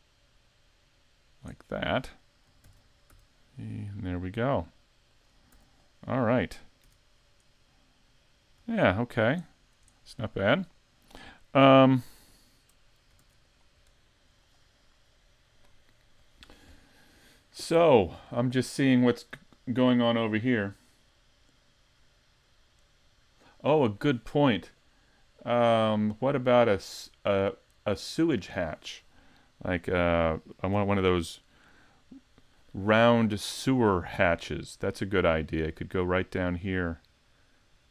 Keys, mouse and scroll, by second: 0.5 click, 2.7 shift+d, 5.2 click, 5.5 a, 6.0 scroll down 3, 6.5 middle click, 6.8 z, 7.1-7.5 scroll down 1, 7.5 middle click, 8.4-8.7 scroll down 2, 8.8 shift+middle click, 9.5 middle click, 10.0 shift+middle click, 10.6 middle click, 11.6 KP_5, 12.4 shift+middle click, 13.2 s, 14.0 shift+middle click, 34.5-35.1 scroll down 2, 35.1 middle click, 37.2-37.7 scroll down 1.